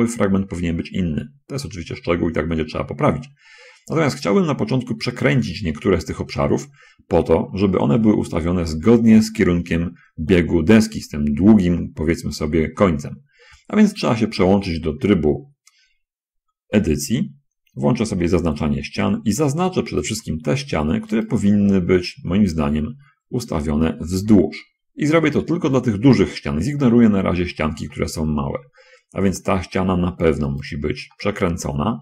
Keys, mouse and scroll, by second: 1.0-1.8 scroll down 2, 2.4 middle click, 3.2-5.3 middle drag, 8.1 shift+middle click, 14.3 Tab, 18.4 3, 20.4 right click, 21.6 shift+right click, 22.1-24.2 middle drag, 25.2-26.4 shift+middle drag, 27.7-30.4 shift+middle drag, 30.9 shift+right click, 31.4-32.0 shift+middle drag.